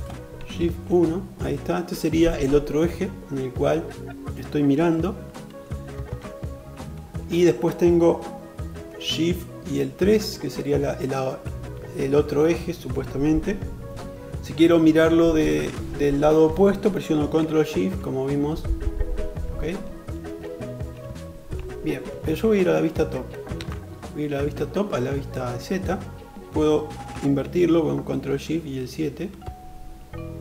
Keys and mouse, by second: 0.3 shift+KP_1, 5.7 alt+z, 9.4 shift+KP_3, 17.4 ctrl+shift+KP_3, 20.7 shift+KP_3, 21.8 shift+KP_7, 23.2 alt+z, 27.9 ctrl+shift+KP_7.